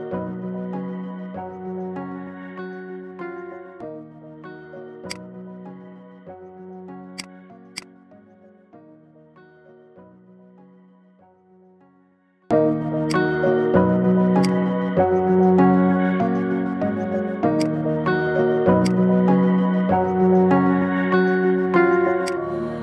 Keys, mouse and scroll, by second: 0.0-1.4 middle drag, 1.4 KP_3, 2.2 g, 5.1-6.2 middle drag, 6.2 scroll up 1, 6.5 shift+middle click, 6.9 click, 7.2-7.6 scroll up 1, 7.6 click, 8.2 KP_1, 9.7 shift+d, 13.5 Tab, 14.2 click, 15.0 g, 18.6 click, 19.4 g.